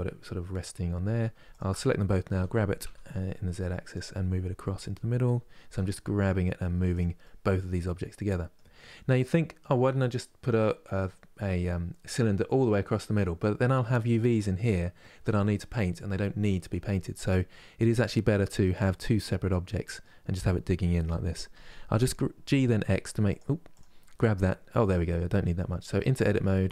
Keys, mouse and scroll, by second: 1.2 shift+click, 2.0 g, 4.4 g, 6.9-17.3 middle drag, 17.3-17.8 scroll up 1, 17.8-21.2 middle drag, 21.2 g, 23.4-25.6 drag, 25.6 Tab.